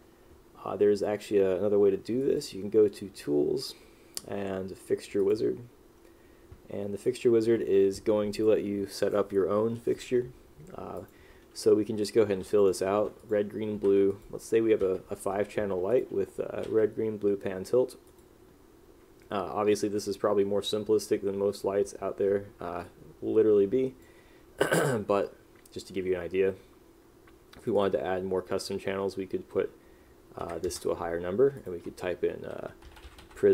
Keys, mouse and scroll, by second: 12.4 r, 13.1 g, 13.9 b, 14.9 p, 30.9 Return, 33.0 p.